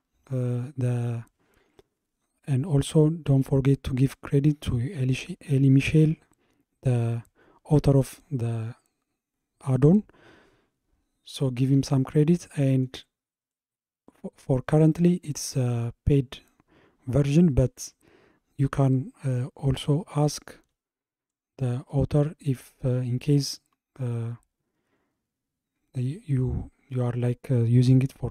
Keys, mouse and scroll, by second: 12.5-16.7 middle drag, 21.9-26.0 shift+middle drag.